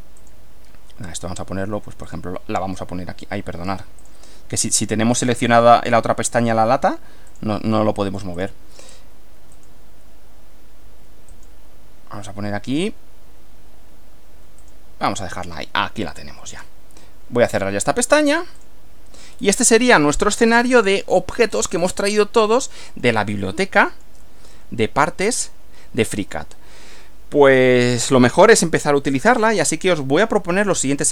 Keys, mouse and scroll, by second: 0.2 click, 2.1 click, 4.0 click, 5.1 click, 7.3 click, 8.3 click, 9.5 click, 11.3 click, 14.6 click, 15.7-16.8 middle drag, 17.5 click, 18.6 click, 19.3 scroll down 2, 19.7 click, 20.7-21.3 shift+middle drag, 21.5-21.9 shift+scroll up 3, 22.2-23.2 shift+middle drag, 23.3-25.2 shift+middle drag, 25.5 middle click, 27.5 click, 30.7 click.